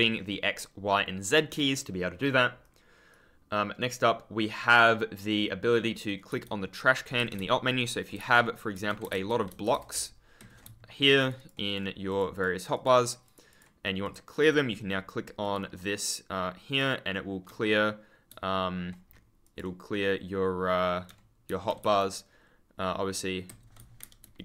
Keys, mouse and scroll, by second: 1.4-2.2 scroll up 1, 2.2-3.0 scroll down 1, 6.2 e, 7.1 Escape, 8.1 e, 9.0 3, 10.3 Escape, 11.1 super+click, 19.3 super+click, 21.7 e, 23.4 Escape, 23.7 w, 24.1 ctrl+space.